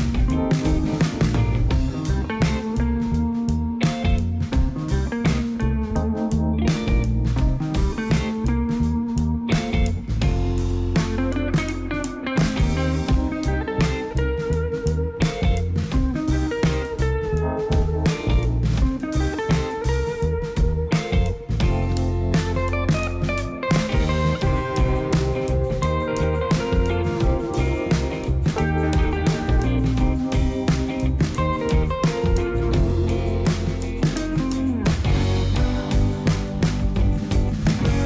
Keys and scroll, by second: 0.8 g, 1.3 x, 5.6 space, 6.6 alt+a, 11.6 space, 13.7 0, 15.2 7, 15.5 shift+z, 21.8 0, 23.6 g, 24.0 x, 25.6 g, 26.0 x, 28.3 g, 28.6 x, 31.1 shift+z, 32.1 space, 37.3 space.